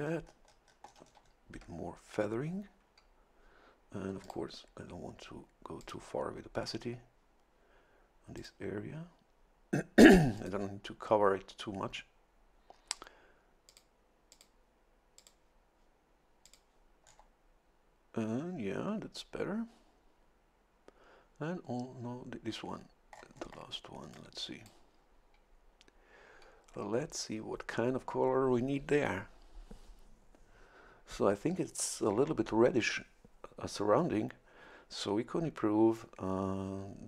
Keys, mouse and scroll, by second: 4.2 click, 5.8 click, 8.4 click, 10.4 click, 13.7 click, 14.3 click, 15.2 click, 16.4 click, 17.0 scroll down 1, 18.8 scroll down 1, 23.1-23.7 scroll up 1, 24.1 click.